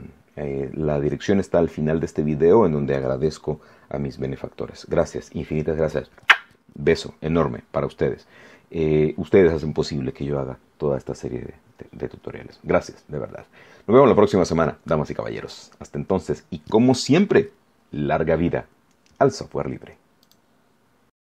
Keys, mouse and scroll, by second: 11.4 scroll down 2, 11.9-12.2 scroll up 2, 13.0 scroll down 2, 20.2 click.